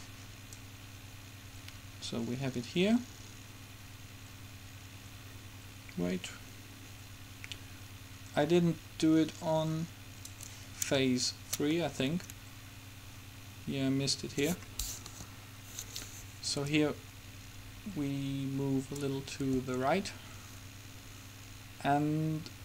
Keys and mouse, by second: 0.7-2.5 drag, 11.9 middle click, 13.9 middle click, 15.2 KP_7, 16.9-18.9 drag, 19.5 r.